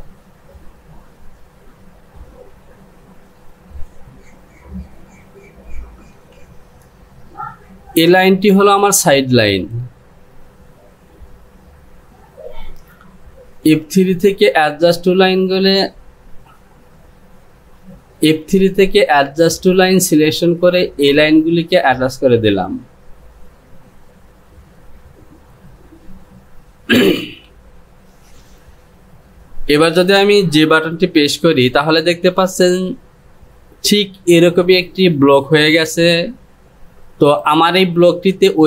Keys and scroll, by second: 31.2 j.